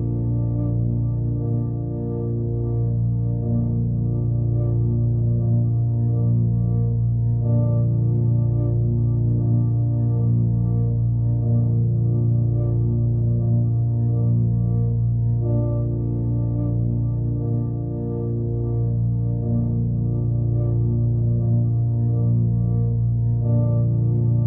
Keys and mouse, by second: 0.1 typing, 0.5 click, 1.0-3.4 drag, 3.5-4.4 drag, 6.0-9.0 drag, 14.0-15.0 drag, 18.0 click, 21.4-22.5 drag, 23.2-24.4 drag.